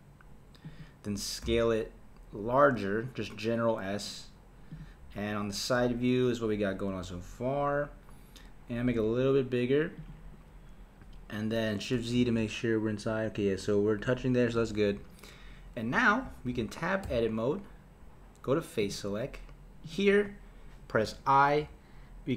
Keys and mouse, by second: 1.4 s, 8.8 s, 12.2 shift+z, 14.6 shift+z, 17.1 Tab, 18.8-19.9 drag, 21.0 i.